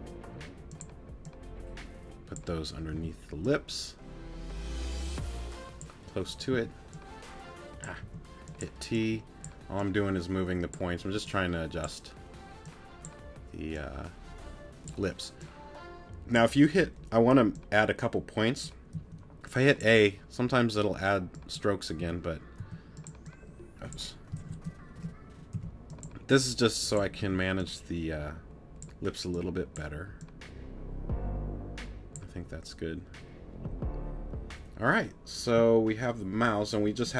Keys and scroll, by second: 2.9 t, 6.5 t, 8.0 t, 18.9 a, 22.0 t, 25.5 t, 27.2 t.